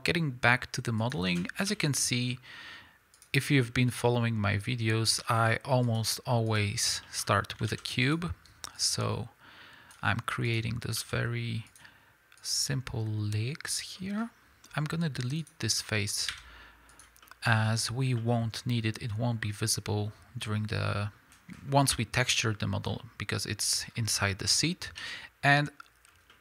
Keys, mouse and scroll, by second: 1.1 ctrl+click, 1.6 KP_1, 3.2 click, 3.9-5.9 ctrl+drag, 6.5 click, 7.0 middle click, 7.0-7.7 scroll up 2, 7.7 ctrl+z, 8.0 click, 8.8-10.5 drag, 11.0 s, 11.7 click, 12.4-14.0 drag, 14.0-15.4 middle drag, 15.4 click, 15.8-25.3 middle drag, 16.3 x, 21.5-22.0 scroll down 2, 22.9-25.0 scroll up 2, 25.0 scroll up 1, 25.0 KP_7, 26.1 scroll down 1, 26.3 middle click.